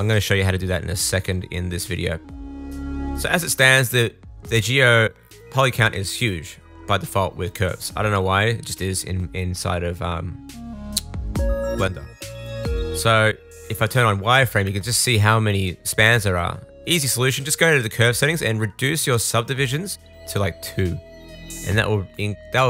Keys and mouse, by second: 0.8-3.3 middle drag, 15.2-16.6 middle drag, 21.2 Tab.